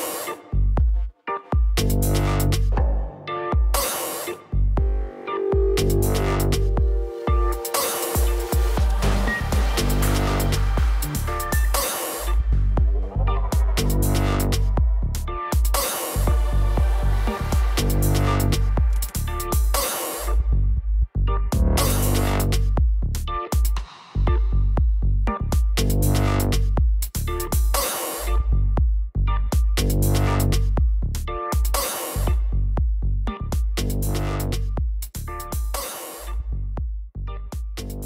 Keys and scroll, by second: 28.1 b.